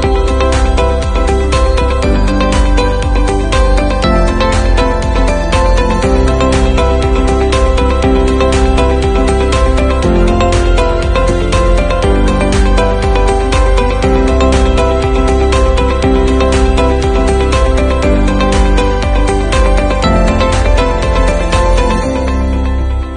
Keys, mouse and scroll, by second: 5.6 ctrl+z, 22.2-23.1 drag.